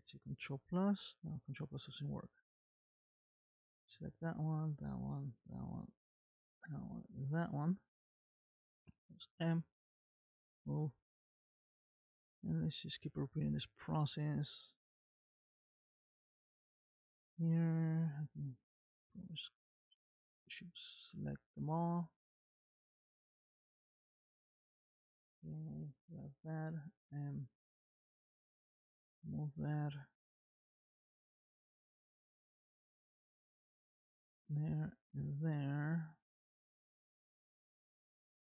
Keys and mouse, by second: 0.5 ctrl+KP_Add, 2.9 click, 4.0 click, 6.4 shift+click, 7.1 shift+click, 9.3 m, 11.8 middle click, 13.0 shift+middle click, 14.6 click, 15.5 middle click, 16.0 shift+middle click, 18.2-19.6 drag, 20.6 shift+click, 22.8 r, 26.6 m, 28.3 shift+middle click, 29.0-30.0 middle drag, 31.3 click, 31.9 r, 34.7 shift+click, 35.6 r, 38.0 m.